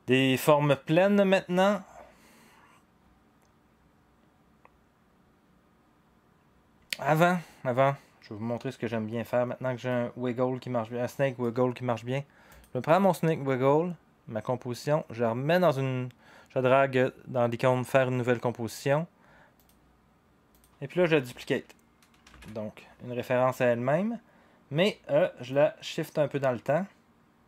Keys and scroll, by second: 22.2 ctrl+d.